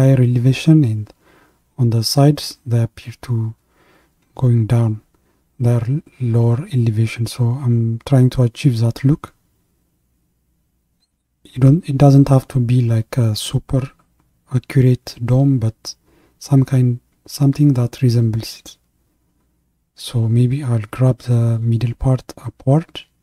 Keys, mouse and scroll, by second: 15.6-17.5 middle drag, 17.5-17.9 scroll down 3, 17.9-21.2 middle drag, 21.2-23.2 drag.